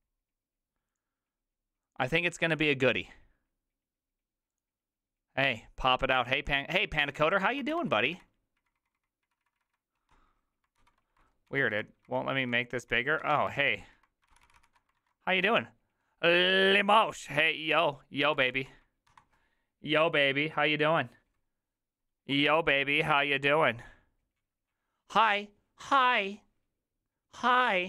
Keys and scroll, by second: 8.1 alt+r, 8.1 Right, 8.2 Right, 8.6 Right, 8.8 Left, 9.0 Left, 9.3 Right, 9.4 Right, 9.6 Right, 9.7 Right, 10.0 Escape, 10.8 alt+h, 11.5 alt+r, 11.7 Right, 12.1 Left, 12.5 Left, 12.8 Left, 13.2 Escape, 13.6 alt+l, 13.8 alt+l, 14.3 ctrl+c, 14.4 ctrl+c, 15.0 alt+q, 19.1 Escape.